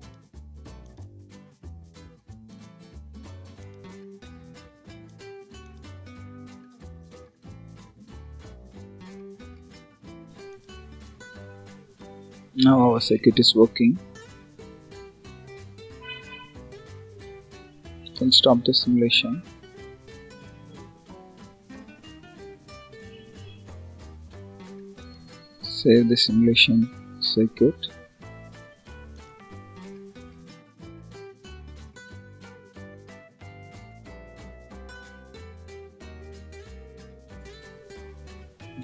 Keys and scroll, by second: 34.7 Return.